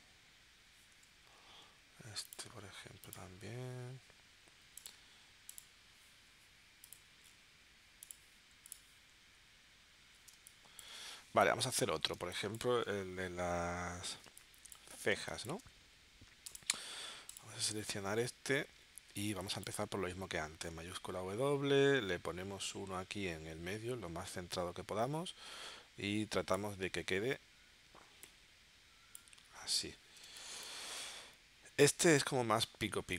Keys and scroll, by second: 10.3 space, 12.2 space, 14.2 space, 15.3 space, 19.3 space, 20.9 shift+w, 30.2 space.